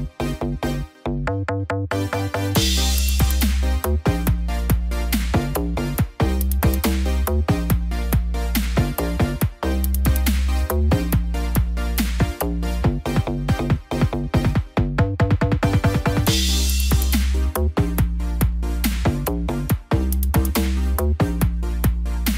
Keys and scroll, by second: 5.8 ctrl+-, 6.5 ctrl+0.